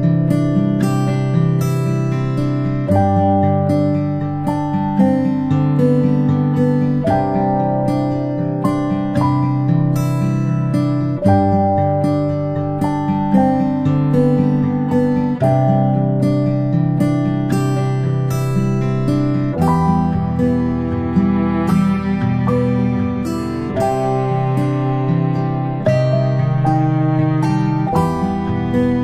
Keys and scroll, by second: 0.2 ctrl+p, 3.6 space, 3.9 space, 6.4-7.6 space, 14.4 space, 14.6 space, 16.4-17.0 typing, 19.2 i, 28.2-29.0 ctrl+space.